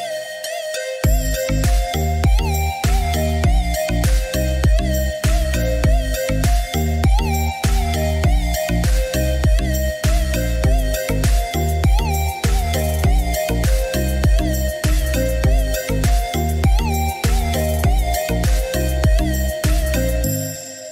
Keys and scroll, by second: 0.7 5, 1.1 8, 2.9 6, 3.2 5, 3.6 Return, 11.3-12.7 typing, 13.0 Return.